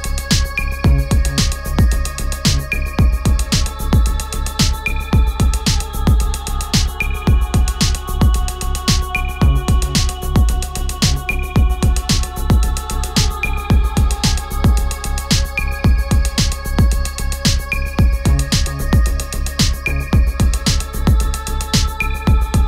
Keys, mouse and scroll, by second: 4.1-9.1 drag, 10.9 click, 14.3 ctrl+t, 16.0-22.3 alt+drag.